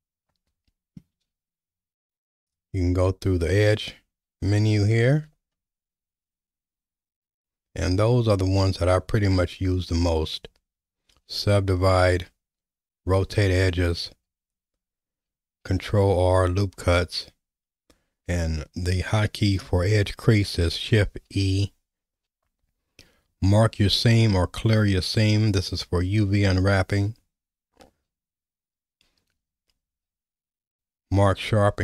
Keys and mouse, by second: 2.5-31.8 drag.